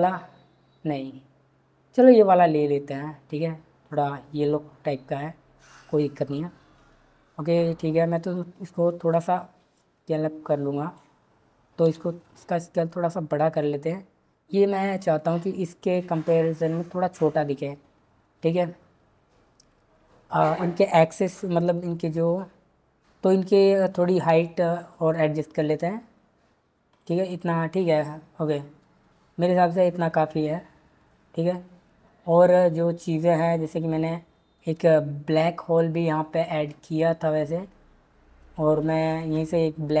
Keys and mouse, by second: 2.0 click, 9.9 drag, 11.8 s, 15.7 click, 19.7 click, 21.9 g, 24.3 z, 26.9 click, 27.3 click, 32.3 click, 38.8 click.